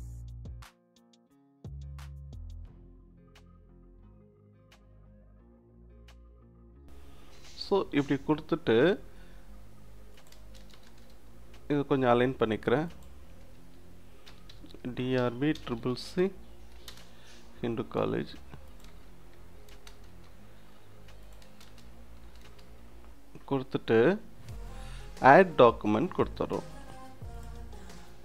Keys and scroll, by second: 0.0-4.1 typing, 2.4 Return, 5.1 BackSpace, 6.2 0, 10.4 space, 14.3 shift+d, 14.5 shift+r, 15.2 shift+b, 15.6 shift+c, 16.9 space, 18.9 space, 21.5 space.